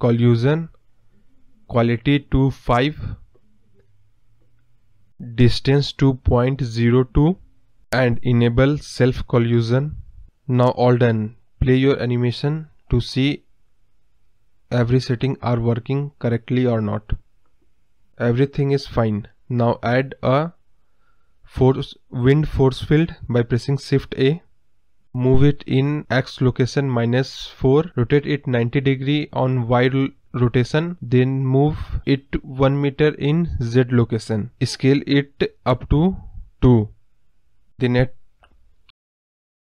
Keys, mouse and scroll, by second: 2.4-6.0 drag, 9.6-14.2 drag, 14.2 middle click, 20.3 space, 26.9 click, 27.7-28.1 scroll down 3, 29.7-34.8 drag, 34.8-35.2 scroll down 1, 35.2-35.6 scroll up 1, 38.4 click, 39.2 scroll down 1, 39.3 middle click.